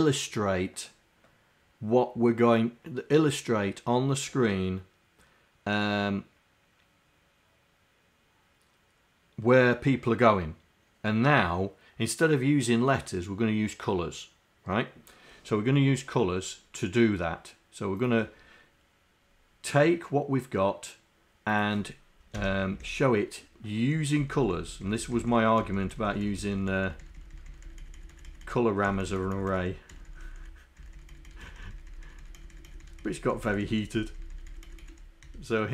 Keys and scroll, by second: 22.4 Home, 22.8 shift+Down, 24.2 shift+Down, 25.2 Down, 25.6 Down, 26.4 Down, 26.9 Down, 27.4 Down, 28.2 shift+Down, 29.1 shift+Down, 29.4 shift+Down, 30.3 shift+Down, 30.8 shift+Down, 31.3 shift+Down, 35.3 shift+Up.